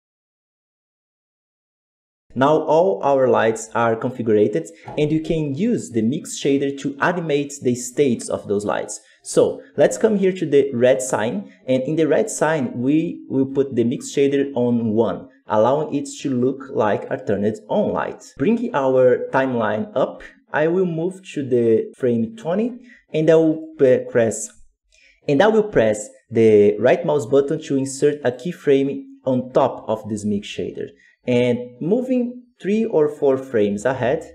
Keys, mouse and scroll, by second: 0.0 click, 0.1 x, 0.1 right click, 0.3 ctrl+v, 0.4 middle click, 0.7 click, 0.8 middle click, 0.9 click, 1.3 click, 1.9 g, 2.3-10.1 ctrl+middle drag, 10.1-15.9 drag, 15.9 scroll down 1, 16.3-18.3 middle drag, 18.3-28.2 drag, 28.2 right click, 31.7-34.3 drag.